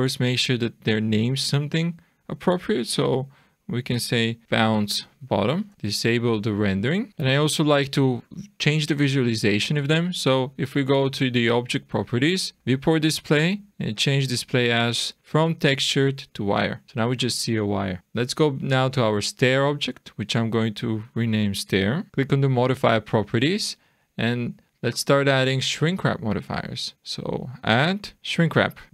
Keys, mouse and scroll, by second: 5.7 BackSpace, 5.7 t, 6.6 click, 7.8 click, 12.0-12.5 scroll down 2, 12.5 click, 12.9-14.0 scroll down 3, 14.2 click, 18.0 click, 20.1 click, 21.0 click, 21.2 click, 22.1 click, 28.7 click.